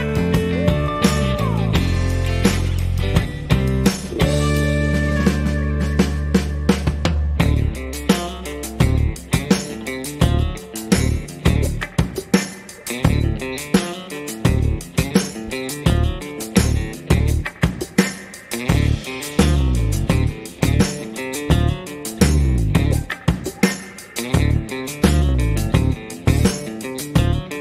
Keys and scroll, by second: 4.3 shift+a, 6.1 g, 8.5 a, 8.6 z, 9.9 a, 10.7 s, 10.8 x, 12.2 s, 12.3 x, 15.3 s, 15.5 y, 17.2 s, 17.3 y, 19.6 g, 19.8 y, 22.8 s, 22.9 y.